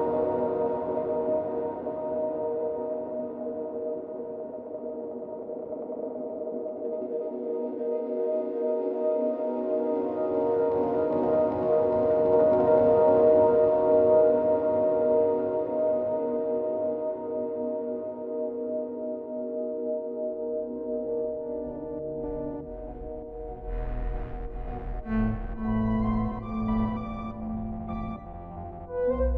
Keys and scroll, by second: 6.9 ctrl+d.